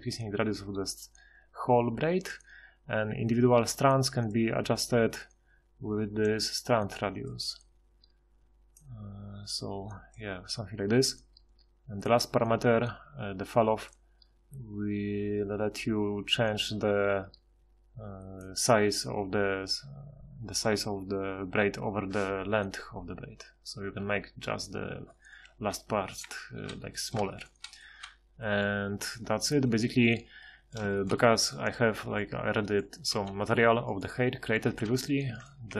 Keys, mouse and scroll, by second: 27.5 middle drag, 32.7-33.1 right drag, 33.1 g, 34.6 a.